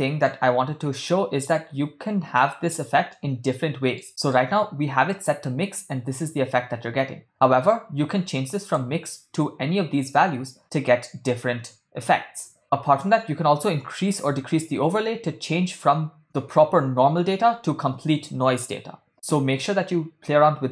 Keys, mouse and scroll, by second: 1.0 middle click, 2.6-3.2 ctrl+middle drag, 3.4 shift+middle click, 4.2 ctrl+middle click, 6.3-7.8 middle drag, 8.6-12.6 drag, 13.0-19.9 drag.